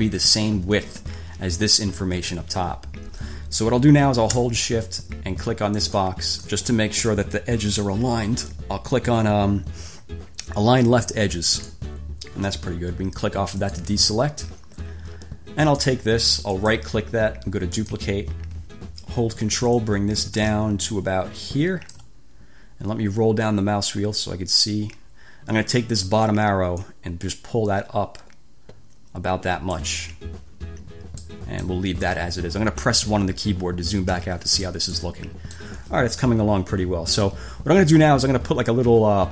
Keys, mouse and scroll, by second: 6.0 shift+click, 11.7 click, 13.8 click, 15.8 click, 16.7 click, 17.9 click, 19.9-22.3 ctrl+drag, 23.2-24.3 scroll down 6, 24.3-24.7 scroll up 2, 27.0-30.2 drag, 31.4-32.1 drag, 34.4 1, 35.1-36.0 drag.